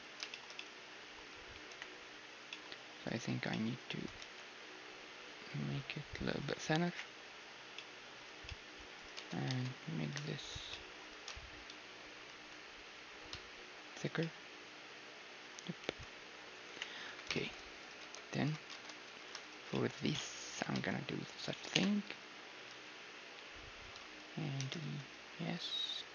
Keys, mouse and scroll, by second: 0.3-4.0 middle drag, 1.3 a, 1.7 KP_1, 3.3-4.8 right drag, 4.0 s, 4.8 middle click, 6.9 KP_1, 7.5-12.7 middle drag, 8.3 a, 9.0-10.4 drag, 9.2 Tab, 10.4-12.4 right drag, 10.7-12.4 drag, 11.1 s, 14.2-16.7 middle drag, 15.8 Tab, 16.7 KP_1, 17.0 a, 17.3 middle click, 17.8 right click, 18.0 Tab, 18.1-21.3 drag, 18.7 ctrl+Tab, 20.5 e, 21.3 middle click, 21.7 KP_3, 22.0 z, 22.7 s, 23.9 z, 24.6 e.